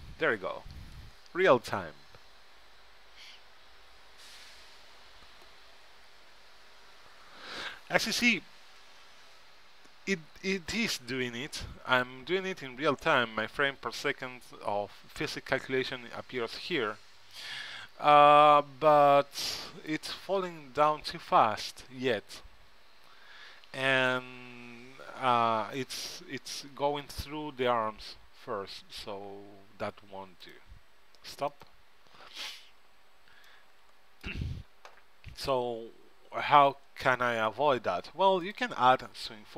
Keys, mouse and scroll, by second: 13.0 middle click, 17.5-21.1 middle drag, 30.8-33.5 drag, 33.3-35.4 middle drag, 38.5-39.5 drag.